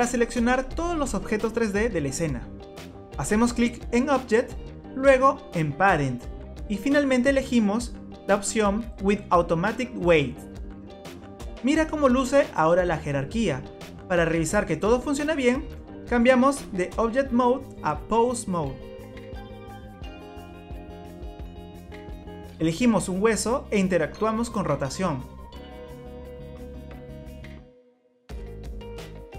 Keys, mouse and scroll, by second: 5.0 click, 19.2 click, 22.3 click, 23.3 middle click, 25.6 r.